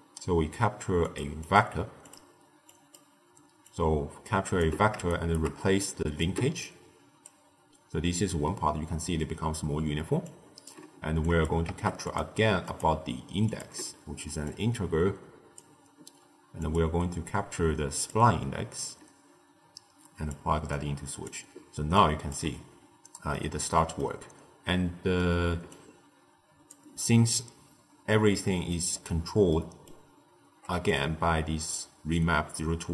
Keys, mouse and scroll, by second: 1.3-2.6 drag, 3.5 click, 5.0 shift+right click, 6.1 click, 10.1 click, 11.1 click, 11.6 shift+d, 12.6-14.5 drag, 16.5-18.8 drag, 20.6 click, 21.9 click, 22.5-23.2 scroll down 1, 23.2 middle click, 24.1-24.6 scroll down 1, 24.6-25.6 middle drag, 25.6 click, 28.3-28.9 middle drag, 28.9-29.4 scroll up 3, 29.4 middle click, 29.9-30.8 scroll up 1, 30.8-32.9 drag.